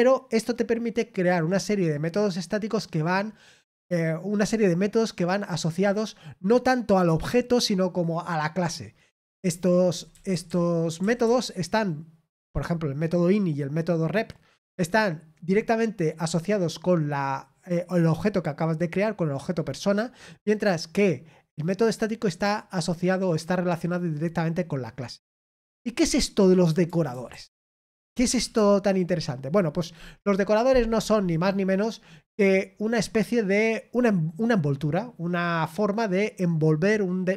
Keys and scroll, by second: 28.3 l.